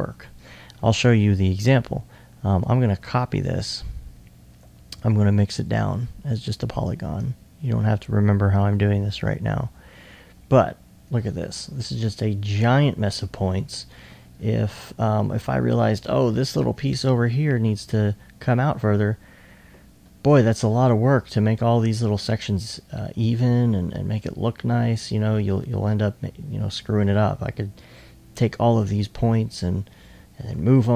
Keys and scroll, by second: 5.5 super+v, 13.0 alt+2, 14.2 2, 29.6 r, 30.5 e.